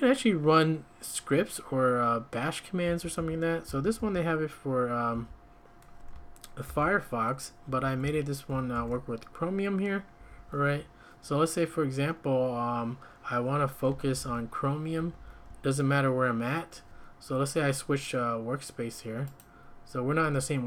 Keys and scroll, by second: 2.8 k, 3.1 k, 3.6 k, 4.0 k, 5.1 k, 6.6 shift+v, 7.7 Escape, 7.8 Escape, 8.0 j, 8.7 shift+v, 10.2 Escape, 10.3 Escape, 14.1 shift+v, 15.0 Escape, 15.2 Escape, 15.5 `.